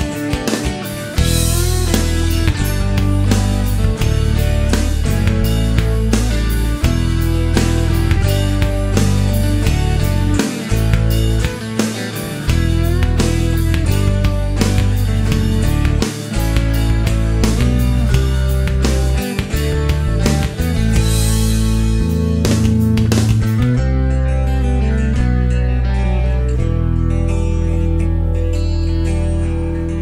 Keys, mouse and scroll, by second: 3.1 shift+right click, 3.4 shift+middle click, 6.6 click, 7.7 click, 8.4-8.9 scroll down 1, 8.9 middle click, 9.8-10.2 scroll up 1, 13.3 shift+scroll down 1, 13.5 middle click, 14.1 scroll down 1, 14.8-15.2 scroll down 1, 16.6 shift+middle click, 17.2-17.7 shift+scroll up 1, 19.9 click, 20.9 click, 21.8 ctrl+s, 23.8 click, 26.0 click, 27.6-28.3 scroll up 1, 29.8 click.